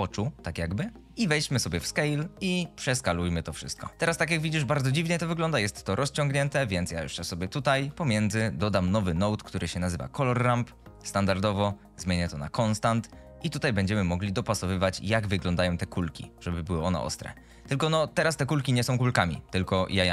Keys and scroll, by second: 7.5 g, 8.4 shift+a.